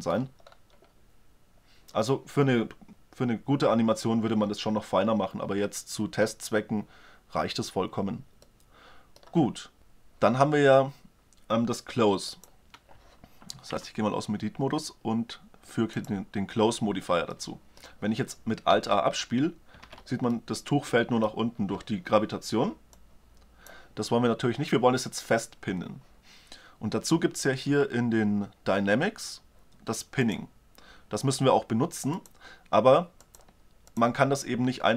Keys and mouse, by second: 8.3-9.8 middle drag, 12.1-14.0 drag, 13.5 Tab, 17.5-18.7 middle drag, 18.5 alt+a, 19.6 alt+a, 22.7 click, 22.9 click, 23.1-24.5 drag, 30.0-31.8 drag.